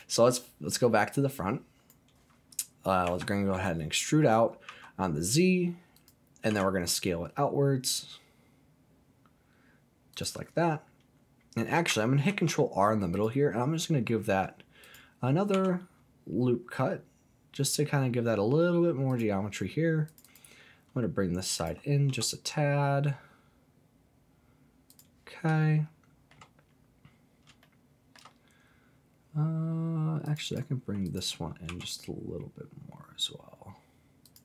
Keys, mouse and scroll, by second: 0.7 scroll up 2, 1.3 click, 3.0 e, 4.6 z, 5.9 click, 6.5 s, 10.1 click, 12.3 ctrl+r, 14.8 click, 15.5 s, 19.1 click, 20.1 click, 20.2 click, 21.5 alt+click, 22.0 s, 24.9 click, 25.6 shift+middle click, 27.6 shift+middle click, 30.2 click, 30.4 click, 31.0 alt+click, 31.7 s, 34.2 click.